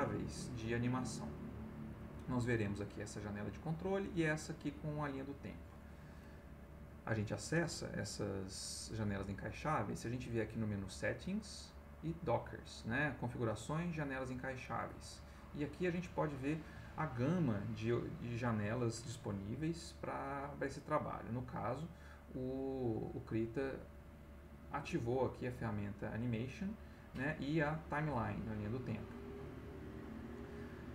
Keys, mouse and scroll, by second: 0.0 click, 7.9 click.